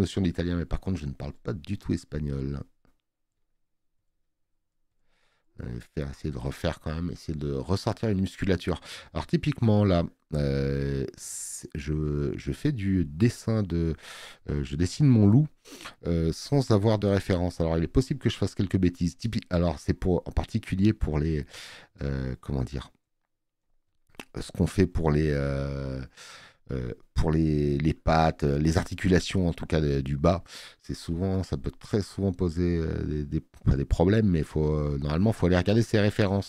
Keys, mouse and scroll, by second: 18.9 space, 19.1 click, 31.3 space, 31.5 click.